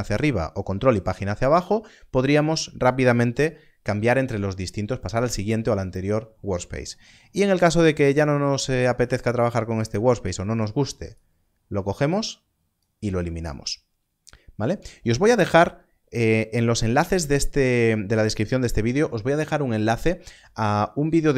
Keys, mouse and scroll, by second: 11.1 right click, 12.2 click.